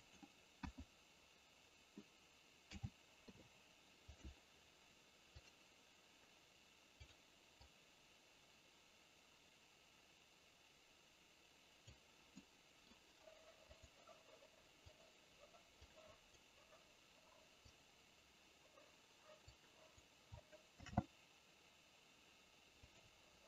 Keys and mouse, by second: 0.1 click, 0.6 KP_1, 2.7 a, 3.2 i, 5.4 click, 7.7-11.8 drag, 12.3 middle click, 13.8 click, 14.9 click, 15.8 click, 17.6 click, 19.4 click, 20.8 shift+d.